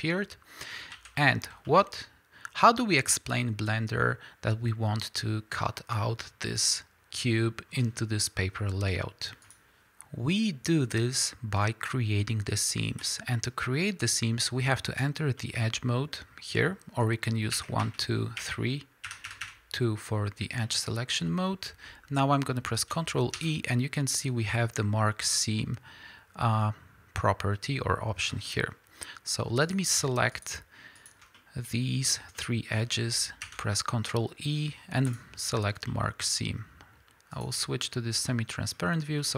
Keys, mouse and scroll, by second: 0.9 alt+a, 3.4-4.9 scroll up 2, 4.9 scroll up 1, 5.2-13.0 middle drag, 13.0 click, 15.4 middle click, 17.6 1, 17.8 2, 18.4 3, 19.1 2, 20.6 middle click, 29.7 click, 30.4 shift+click, 31.3 middle click, 32.0 scroll up 1, 32.4 middle click, 35.1-37.3 middle drag, 35.2 ctrl+e, 35.7 scroll down 1, 37.3 click, 38.3-39.3 middle drag, 38.8-39.2 scroll up 2.